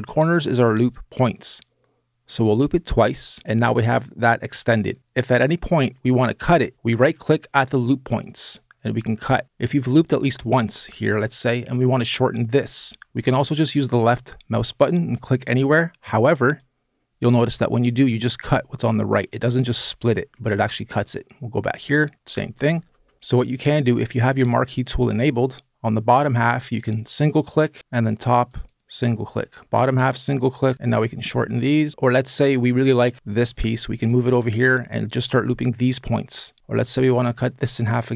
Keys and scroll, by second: 19.9 super+z, 22.7 super+z, 36.6 super+z.